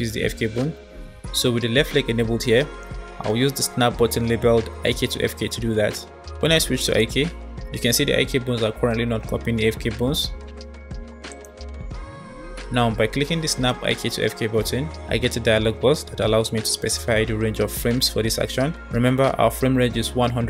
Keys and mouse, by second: 6.8 click, 11.4 click, 13.6-20.4 drag.